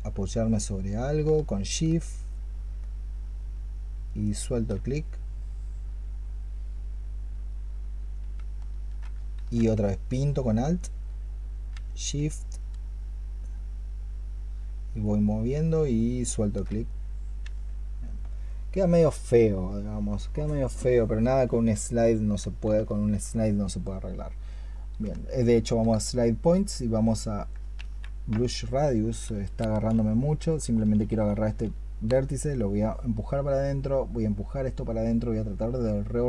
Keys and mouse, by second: 3.1-9.2 shift+drag, 9.2 ctrl+z, 9.8 alt+click, 13.5-15.3 shift+drag, 18.3 alt+click, 19.7 alt+click, 22.8 alt+click, 24.9-25.7 space, 27.6 ctrl+z, 29.1-31.3 typing.